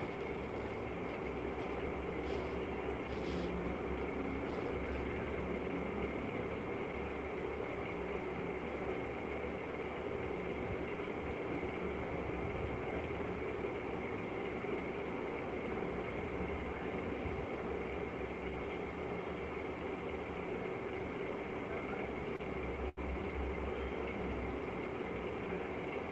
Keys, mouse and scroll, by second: 0.0 alt+click, 0.3 alt+click, 0.8 shift+click, 1.3 shift+click, 2.0 right click, 3.4 right click, 4.4 click, 4.4 shift+click, 7.0 click, 8.2 click, 9.9 click, 11.1 click, 12.5 click, 14.6 click, 15.0 click, 15.8 click, 16.4 click, 17.6 click, 18.9 click, 19.7 click, 20.5 click, 22.3 click, 24.5 click.